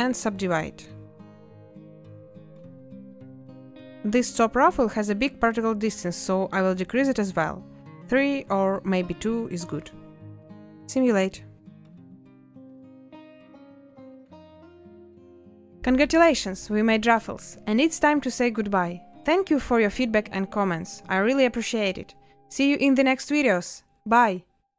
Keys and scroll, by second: 4.3 shift+a, 5.7 Return, 22.9 space.